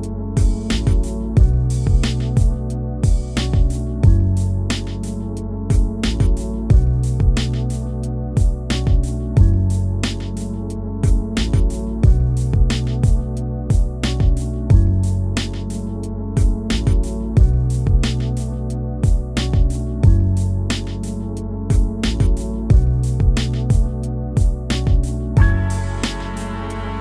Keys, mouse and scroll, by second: 0.3 scroll down 1, 0.4 shift+middle click, 0.7 scroll up 1, 0.9 middle click, 1.9 scroll up 1, 2.0 click, 2.3 scroll down 3, 2.5 shift+middle click, 3.6 middle click, 4.0 click, 4.2 shift+middle click, 4.4 click, 4.9 scroll down 1, 5.0 shift+middle click, 5.6 middle click, 6.5-6.9 scroll up 5, 6.9 shift+middle click, 7.1 click, 7.5-7.8 scroll down 4, 7.9 middle click, 8.6 scroll up 1, 8.7 middle click, 9.0 click, 9.3-10.1 scroll down 3, 10.3 middle click, 10.9 middle click, 11.8 scroll up 1, 11.9-18.4 middle drag, 19.5 shift+middle click, 19.6 scroll up 2, 19.8 middle click, 20.3 scroll up 1, 20.4 middle click, 20.6-21.6 drag, 21.6 scroll down 1, 21.8 click, 22.7 scroll down 1, 22.8 middle click, 23.4 scroll down 2, 23.6 middle click, 24.2-24.6 scroll up 5, 24.6 middle click, 24.9 scroll up 1, 25.1 click, 25.4 scroll down 1, 25.6 shift+middle click, 26.0 scroll up 1, 26.1 scroll down 1.